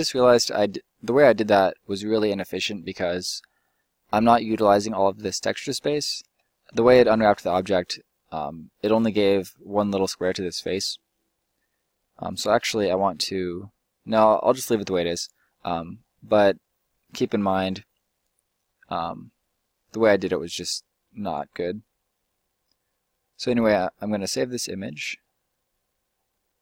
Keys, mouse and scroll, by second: 5.8 middle click, 6.2 Tab, 12.3 u.